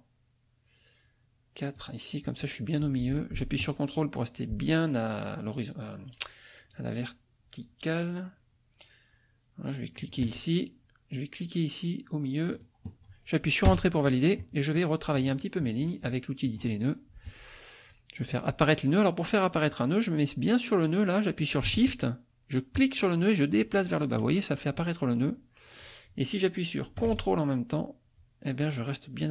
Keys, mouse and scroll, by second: 1.7 click, 10.0 ctrl+click, 12.5 click, 13.7 Return, 14.7 click, 15.3-16.4 middle drag, 16.4 click, 22.7-29.3 shift+drag.